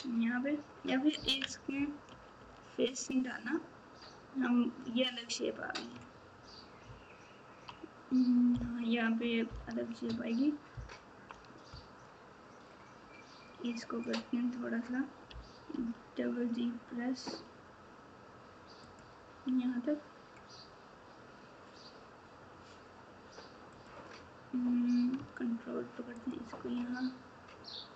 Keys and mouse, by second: 2.1 ctrl+z, 6.8 ctrl+KP_6, 7.3 ctrl+KP_6, 8.5 ctrl+KP_4, 9.0 ctrl+KP_4, 9.5 ctrl+KP_8, 10.7 ctrl+KP_4, 11.2 ctrl+KP_4, 14.0 click, 23.7 click.